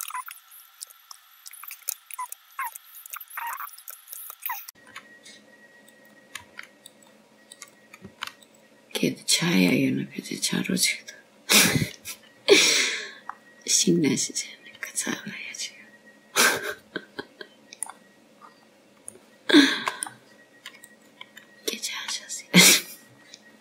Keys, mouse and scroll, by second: 0.0 g, 0.1 click, 0.4 ctrl+r, 1.0 middle click, 1.3 g, 1.6 middle click, 2.1 click, 2.4 ctrl+r, 3.1 click, 3.2 g, 3.5 click, 3.6 g, 3.9 click, 4.0 g, 4.2 middle click, 4.3 click, 4.5 click, 4.6 g, 7.1 click, 7.6 g, 9.3 g, 10.4 click, 10.9 g, 12.0-12.7 scroll down 2, 12.7 middle click, 16.0 scroll up 1, 16.7 click, 18.2 scroll down 1, 19.3 middle click, 21.3-22.0 scroll up 1, 22.0 shift+middle click, 22.0 scroll up 1.